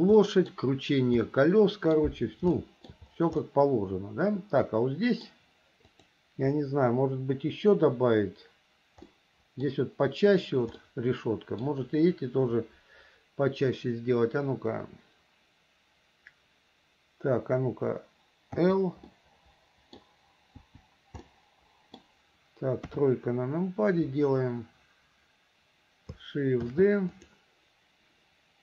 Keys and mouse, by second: 0.4 middle click, 1.5 middle click, 2.7 shift+middle click, 3.6-5.4 middle drag, 6.1 click, 9.3 middle click, 11.0 middle click, 18.8 l, 19.3 click, 20.8 l, 21.4 click, 21.6 middle click, 23.0 KP_3, 26.8 shift+d.